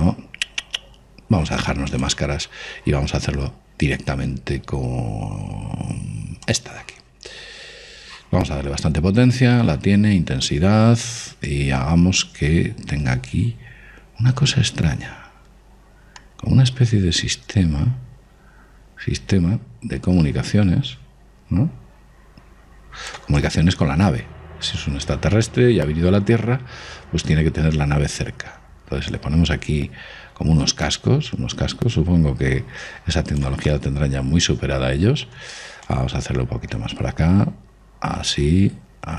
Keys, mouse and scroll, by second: 0.0 ctrl+z, 2.6 click, 12.2 click, 24.2 click, 34.4-36.2 middle drag, 36.6 click.